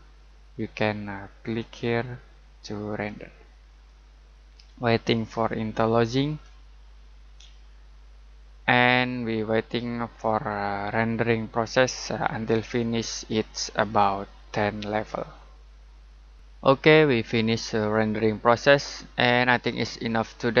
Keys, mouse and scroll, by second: 1.4 click.